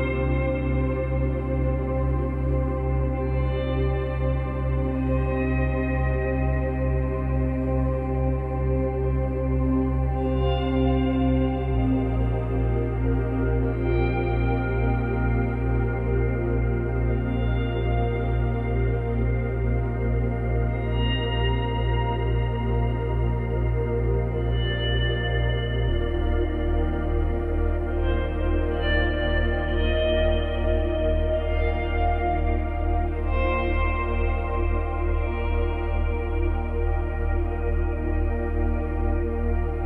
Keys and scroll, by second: 9.6 space, 13.9 space, 16.8 space, 27.1 F9.